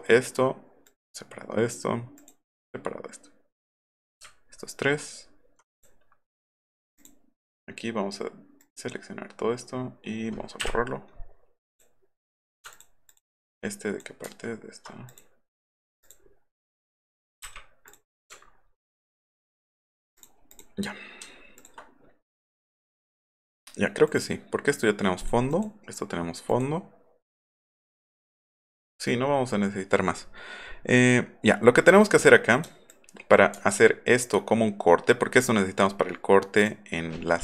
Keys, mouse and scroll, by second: 0.9 click, 2.2 click, 4.3-4.6 alt+scroll up 2, 5.0-5.5 alt+scroll down 4, 5.8 click, 7.0 click, 8.6 click, 10.6 Delete, 11.7 click, 12.2 click, 12.7 ctrl+click, 13.1 ctrl+click, 13.5-14.0 ctrl+drag, 14.2 ctrl+z, 15.1 click, 16.0 click, 16.9 click, 17.9 click, 18.4 alt+scroll up 2, 20.2 click, 20.5 click, 21.6 ctrl+click, 24.1 click, 25.2 click, 25.5 click, 26.5 click, 32.9-33.3 ctrl+drag, 36.6 click.